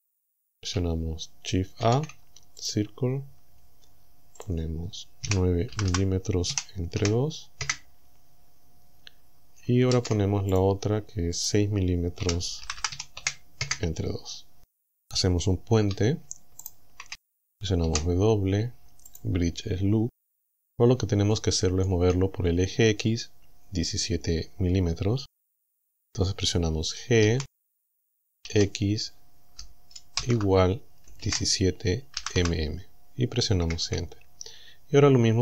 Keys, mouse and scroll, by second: 1.9 shift+a, 2.7 click, 4.4 click, 5.3 KP_9, 5.7 m, 6.5 KP_Divide, 7.0 KP_2, 7.7 KP_Enter, 9.9 shift+a, 10.6 click, 11.4 click, 12.3 KP_6, 12.7 m, 13.2 KP_2, 13.7 KP_Enter, 16.7 alt+shift+right click, 17.9 w, 19.1 click, 19.9-20.3 scroll up 2, 20.4-20.8 scroll down 2, 21.3 shift+click, 27.3 g, 28.5 x, 30.2 shift+0, 31.1 KP_1, 31.3 KP_7, 32.2 m, 33.5 KP_Enter.